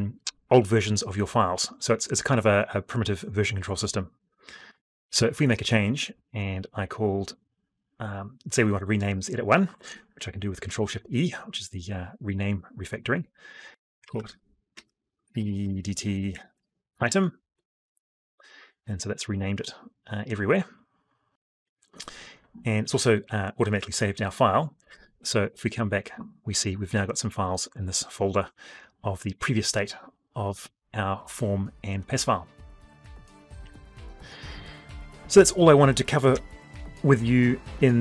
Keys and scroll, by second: 10.5 ctrl+shift+e, 24.6 alt+Tab, 35.1 F12.